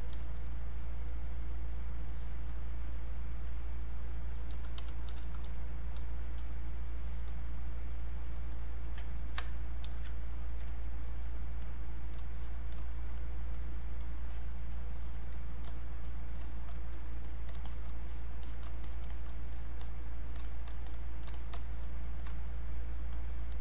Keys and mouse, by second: 0.7 click, 6.7 click, 9.1 ctrl+click, 9.9 alt+click, 10.3 ctrl+right click, 10.9 click, 16.9 shift+click, 18.8 shift+click, 19.1 alt+click, 20.9 shift+click, 21.8 shift+click.